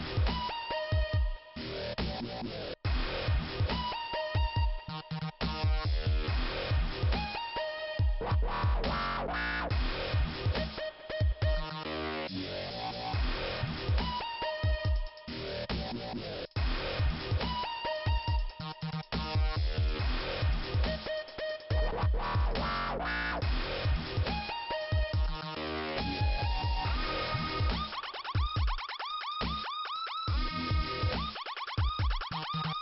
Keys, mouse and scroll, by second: 0.8 click, 0.9 click, 2.1 click, 5.0 click, 5.0 click, 5.1 click, 5.6 click, 5.9 click, 5.9 scroll down 3, 7.8 click, 10.1 click, 10.2 click, 10.7 click, 10.9 click, 11.0 Return, 11.8 ,, 11.9 middle click, 13.1 scroll up 2, 14.7 click, 14.8 click, 15.5 click, 15.6 click, 16.5 scroll up 2, 18.2-19.2 scroll down 2, 19.2 click, 19.4 click, 19.5 click, 19.5 click, 20.3 click, 20.4 click, 20.9 click, 21.0 click, 22.6 click, 23.8 click, 24.1 click, 24.2 click, 25.5 click, 27.9 click, 28.0 click, 28.6 click, 28.8 click, 29.1 click, 29.1 double click, 30.3 double click, 30.4 double click, 30.9 click, 30.9 click, 32.0 click.